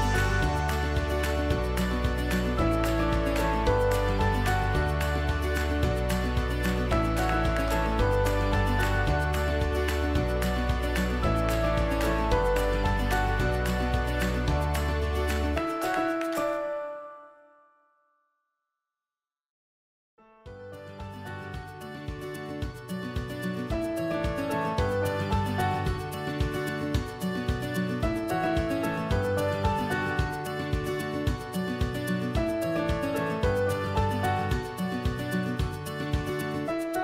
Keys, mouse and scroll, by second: 24.4-27.1 alt+shift+drag, 36.5-37.0 alt+drag.